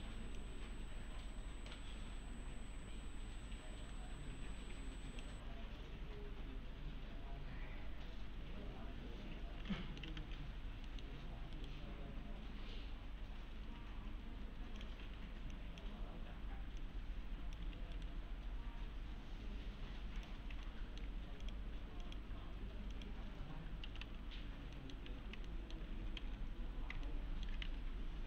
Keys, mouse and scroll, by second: 0.7-5.4 click, 8.3 1, 9.8 middle click, 9.8-10.7 typing, 10.5-10.9 scroll down 1, 10.9 middle click, 11.2-11.6 scroll up 1, 11.6 right click, 14.8 click, 15.0 1, 15.5 click, 17.1-17.7 click, 17.6 1, 17.9 right click, 20.2 click, 20.7-21.3 alt+middle click, 21.4 click, 23.6-25.1 typing, 24.4-24.8 scroll down 1, 24.8 middle click, 25.5 alt+middle click, 26.2 alt+x, 27.1-27.7 alt+middle click, 27.7 1.